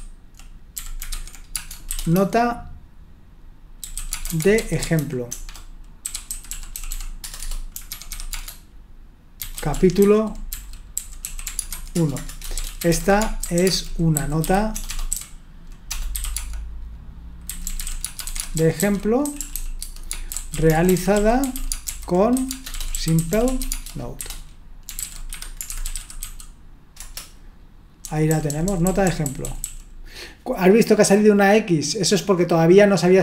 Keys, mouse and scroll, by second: 0.0-16.3 typing, 17.6-27.0 typing, 28.0-28.7 typing.